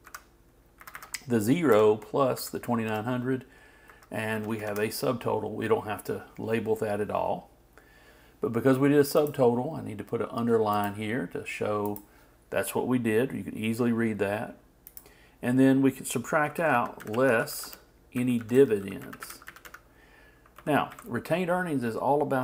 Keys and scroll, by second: 16.3-18.0 typing.